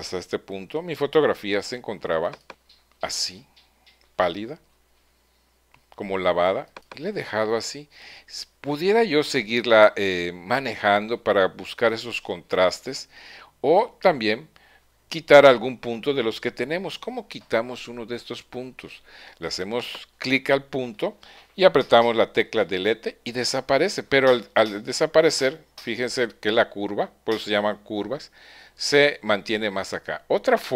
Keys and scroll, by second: 22.9 BackSpace.